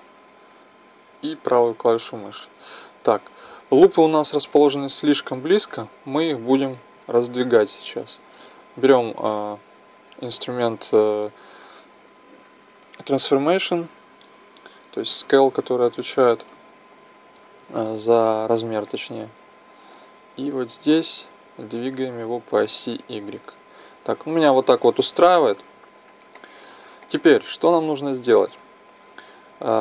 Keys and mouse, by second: 4.6-6.3 middle drag, 6.6-26.4 drag, 26.4-29.8 middle drag.